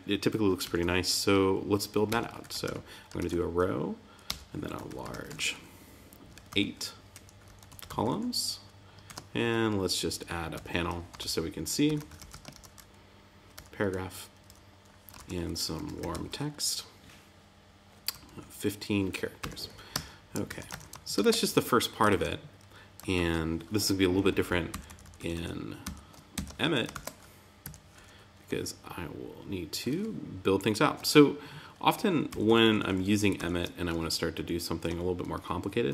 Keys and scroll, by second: 0.6 super+s, 3.1 shift+>, 9.0 shift+>, 12.5 shift+>, 15.1 shift+BackSpace, 19.9 Tab, 20.4 super+s, 20.6 super+Tab, 21.1 super+r, 22.0 super+Tab, 23.1 super+z, 24.7 alt+shift+Left, 26.3 shift+Left, 26.9 super+c, 27.6 Right, 32.2 alt+shift+Left, 33.9 alt+shift+Right.